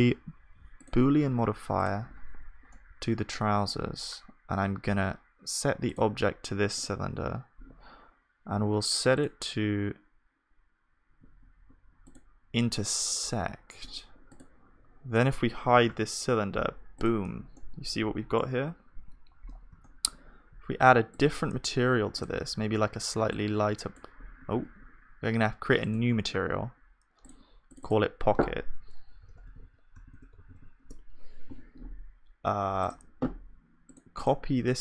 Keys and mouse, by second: 2.7-7.9 middle drag, 16.0 click, 16.0 h, 17.6-19.4 drag, 17.6-24.2 middle drag, 17.6-19.4 right drag, 24.5 ctrl+z, 27.8-30.1 drag, 30.1 BackSpace.